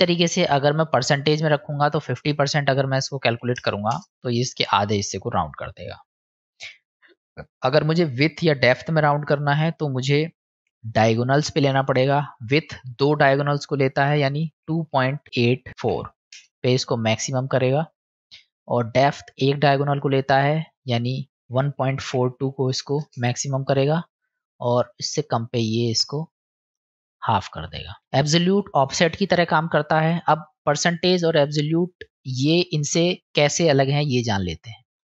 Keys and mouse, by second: 0.5 click, 2.2-4.5 drag, 6.6-9.2 drag, 11.2-17.0 drag, 18.6 click, 19.9-23.7 drag, 25.1-27.6 drag, 28.0-33.5 drag, 34.8 ctrl+z, 34.8 middle click.